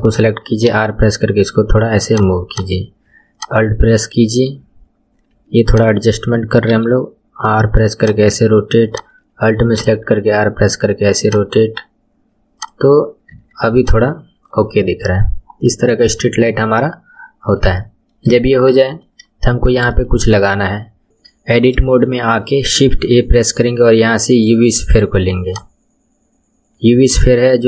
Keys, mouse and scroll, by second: 0.6 r, 2.5 click, 3.0 space, 3.3 click, 3.5-4.1 space, 5.7 alt+click, 6.6 r, 8.8 alt+click, 9.8 r, 12.5 click, 12.9-13.3 scroll down 3, 13.3 Tab, 13.8 click, 15.3-16.5 scroll up 5, 17.4-17.8 scroll down 3, 17.8-18.4 shift+middle drag, 18.4-18.8 scroll up 2, 18.8-19.5 shift+middle drag, 19.5-19.8 scroll up 2, 19.8-20.8 shift+middle drag, 20.8 scroll down 2, 21.0 shift+middle click, 21.8-22.9 shift+middle drag, 22.9 shift+a, 26.4-27.6 scroll down 1.